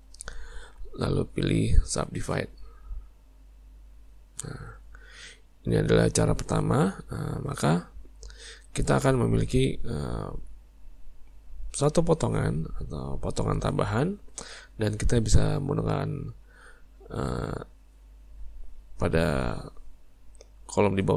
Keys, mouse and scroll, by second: 5.6-10.4 middle drag.